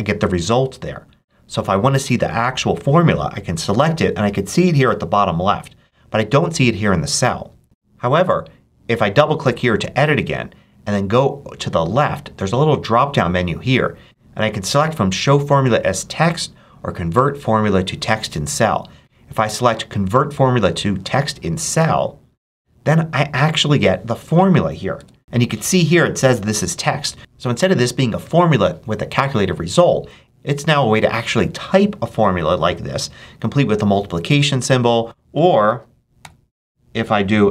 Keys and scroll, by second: 24.8 Return, 35.6 super+a, 36.1 super+=, 36.7 =.